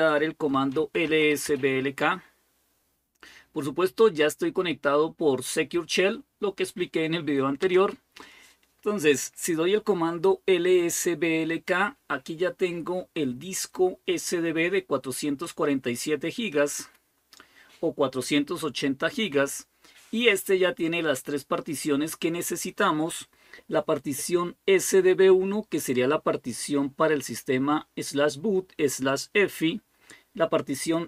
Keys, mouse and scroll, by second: 0.1-1.7 typing, 7.4 Return, 15.2-17.0 drag.